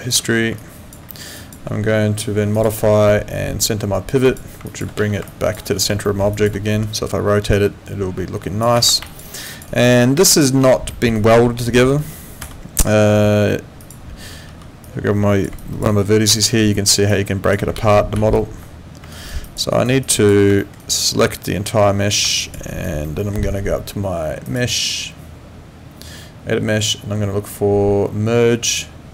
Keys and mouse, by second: 0.1 space, 0.6 alt+click, 1.1 alt+middle click, 1.4 alt+click, 2.5 click, 4.3 click, 4.7 alt+click, 4.9 w, 5.3 alt+click, 6.1 alt+middle click, 6.3 alt+click, 6.7 e, 7.5 click, 8.9 z, 9.0 alt+click, 9.3 alt+right click, 9.4 alt+click, 9.7 alt+right click, 10.3 alt+click, 10.5 alt+right click, 10.9 alt+middle click, 11.1 alt+right click, 12.4 F9, 13.8 click, 14.5 w, 14.8 click, 15.6 alt+click, 15.9 alt+right click, 17.1 click, 17.7 ctrl+z, 19.1 alt+right click, 19.5 alt+click, 19.8 alt+right click, 20.0 alt+click, 20.6 alt+middle click, 20.8 alt+right click, 21.5 click, 22.4 alt+click, 22.7 alt+right click, 23.0 alt+middle click, 24.5 click, 28.6 click.